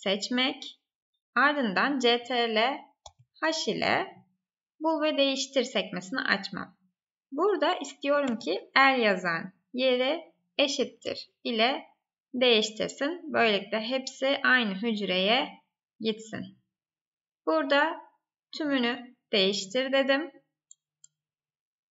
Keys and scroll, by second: 3.0 ctrl+h, 9.5 Tab.